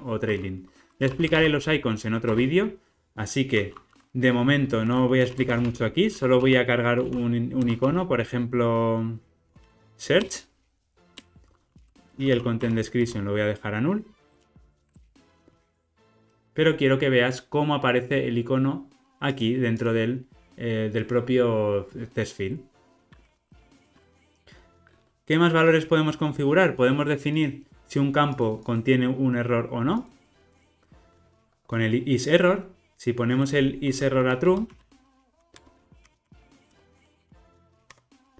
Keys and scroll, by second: 2.4 Return, 7.6 Return, 10.2 Return, 14.3 alt+super+l, 23.9 super+b, 30.4 alt+super+[, 35.5 Return.